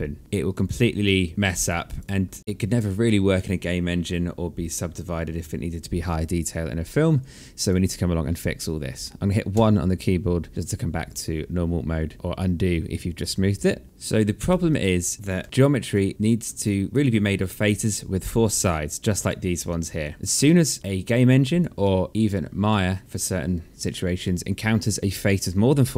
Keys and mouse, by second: 0.2 alt+click, 1.2 alt+click, 2.4 click, 8.3 1, 9.6 alt+click, 12.1 click, 13.8 alt+click, 14.9 f, 15.7 alt+click, 19.1 click, 19.5 alt+click, 20.1 alt+middle click, 20.4 alt+click, 20.8 alt+middle click, 24.9 click, 25.3 alt+click.